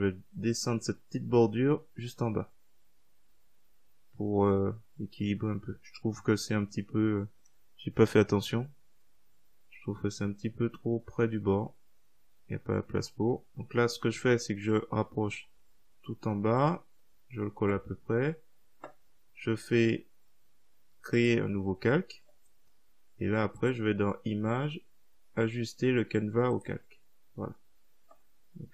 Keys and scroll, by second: 15.1 Up.